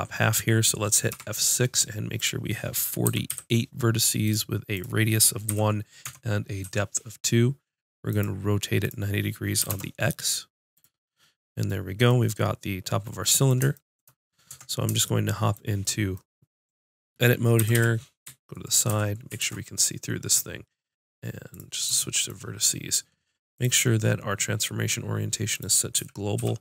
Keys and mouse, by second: 1.1 F6, 12.1 middle click, 14.5 Tab, 17.5 KP_1, 17.8 KP_5, 18.8 z, 19.4 ctrl+Tab, 23.5-25.9 drag, 25.9 a, 26.3 b.